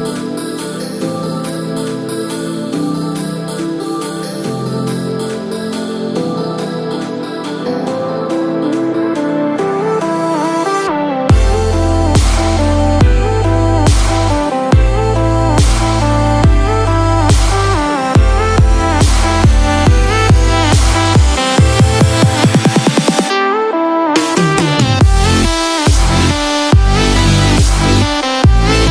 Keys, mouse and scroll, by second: 0.5-1.1 scroll up 5, 1.0 shift+middle click, 1.9-2.2 scroll up 2, 2.3 shift+middle click, 3.2 scroll up 1, 4.5 click, 8.5 r, 11.8 scroll down 4, 12.7 shift+middle click, 13.8-14.5 scroll down 2, 14.5-14.9 scroll down 1, 15.7 shift+middle click, 19.4 i, 22.9 middle click, 26.0 click, 26.9 scroll up 1, 27.1 middle click, 28.7-28.9 scroll down 1.